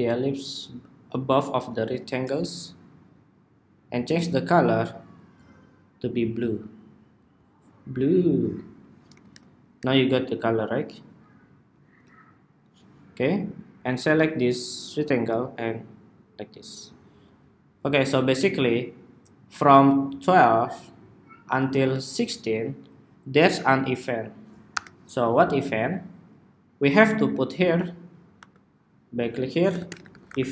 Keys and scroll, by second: 24.6 super+-, 30.3 Escape.